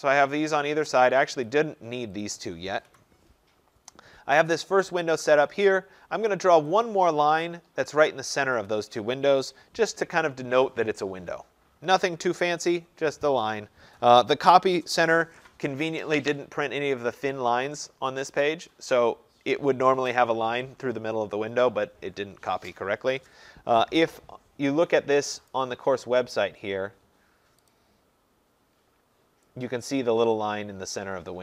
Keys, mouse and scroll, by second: 1.5 click, 2.3 click, 3.0 Delete, 6.9 click, 8.0 click, 8.7 click, 9.5 Return, 25.6 click, 26.3-27.2 scroll, 27.8 click.